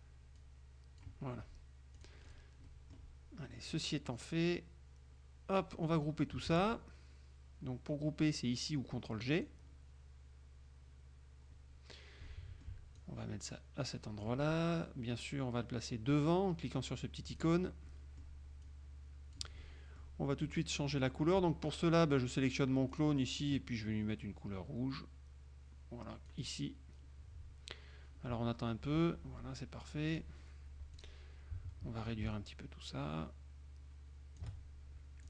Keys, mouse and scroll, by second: 0.5 click, 2.1 click, 2.8 click, 3.8-5.9 drag, 9.4 click, 12.4 click, 13.1-14.6 drag, 17.4 click, 18.0 click, 18.8-20.4 drag, 22.1 click, 23.1 click, 26.4 click, 30.2 click, 31.1 click, 32.4-34.7 ctrl+shift+drag.